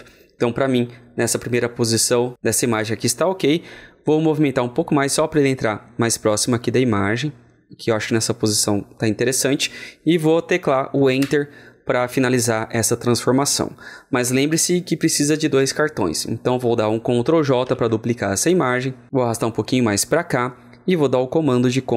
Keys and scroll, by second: 17.5 ctrl+j, 21.6 ctrl+j.